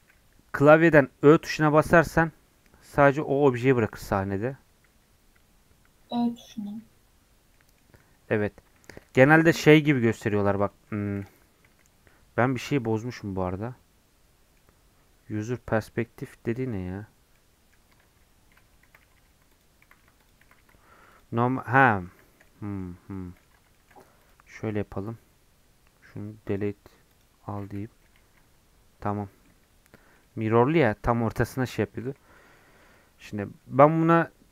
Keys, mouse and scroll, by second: 1.5 /, 3.9 middle click, 4.8 /, 5.3-6.5 /, 6.8 /, 7.5 middle click, 8.0 /, 9.6 click, 9.9 shift+middle click, 10.1 scroll up 3, 10.2-11.6 middle drag, 11.6 KP_Decimal, 12.0-15.7 middle drag, 16.5 KP_5, 16.9 KP_5, 17.3 middle click, 18.8-21.0 typing, 19.5 click, 20.2 click, 21.1 click, 21.8-24.2 middle drag, 24.2-28.3 drag, 28.3 KP_Decimal, 29.0 scroll down 5, 29.4-32.0 middle drag, 32.0 KP_Decimal, 32.3 middle click, 32.7 scroll down 6, 32.9 middle click, 33.6 scroll up 1, 33.8-34.5 middle drag.